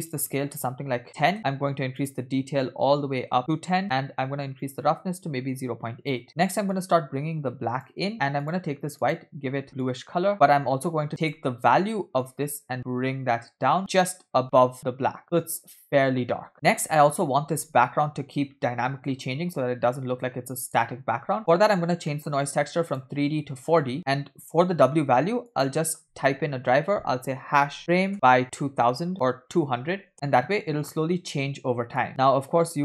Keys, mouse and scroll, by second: 0.0-1.3 drag, 2.0-3.7 drag, 4.6-6.2 drag, 6.7-7.9 drag, 8.4 click, 9.0 click, 11.2 click, 16.5-16.8 scroll down 2, 17.6 space, 21.2 space, 21.4-22.0 scroll down 2, 22.1 middle click, 22.3-22.8 scroll up 2, 22.9-23.9 drag, 25.5-30.1 drag, 29.9 0, 32.1-32.8 drag.